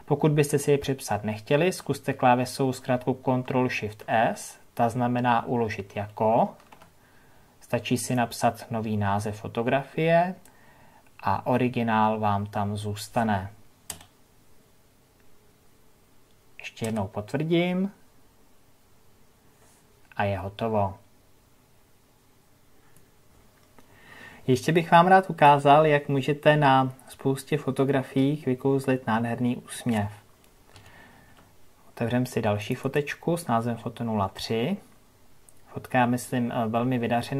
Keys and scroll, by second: 32.7 ctrl+o.